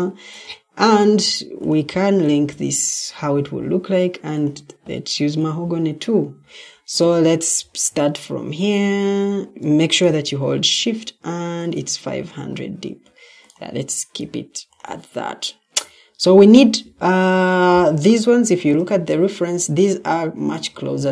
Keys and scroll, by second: 1.0 Escape.